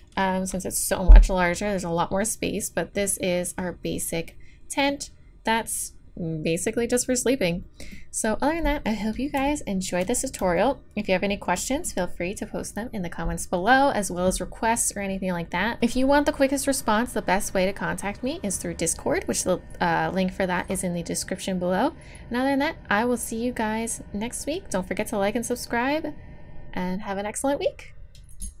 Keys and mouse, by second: 0.1-3.1 middle drag, 3.1 click, 9.8-13.5 drag, 13.5-28.6 middle drag.